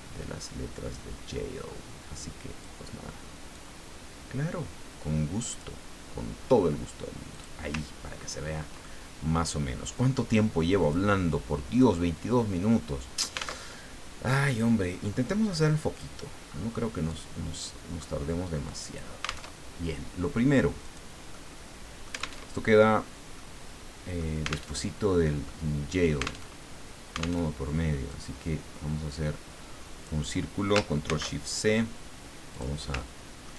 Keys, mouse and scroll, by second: 3.5-5.7 drag, 7.3 click, 7.9-8.5 ctrl+scroll down 1, 8.8 ctrl+middle click, 10.8 click, 11.7 click, 12.6-13.7 middle drag, 13.7 alt+Tab, 14.9-15.5 scroll up 2, 15.5 click, 16.5-17.1 scroll up 1, 17.1 click, 17.9-18.7 scroll up 1, 18.7 click, 19.5 alt+Tab, 20.8 click, 21.3 middle click, 22.0 alt+click, 22.4 alt+Tab, 23.3-24.3 drag, 24.7 alt+Tab, 25.4-26.5 drag, 26.5 alt+Tab, 27.4 alt+Tab, 28.1-30.3 drag, 31.0 ctrl+shift+c, 32.5 click, 32.9 ctrl+middle click.